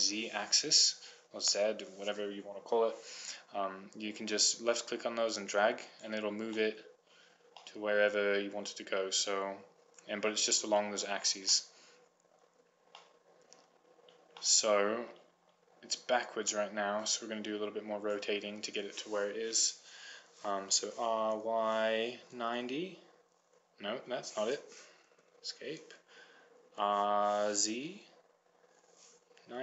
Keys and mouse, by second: 5.2-6.3 drag, 6.8-8.0 middle drag, 10.6-11.9 drag, 11.9 middle click, 17.7-19.0 drag, 21.2 r, 27.1 r.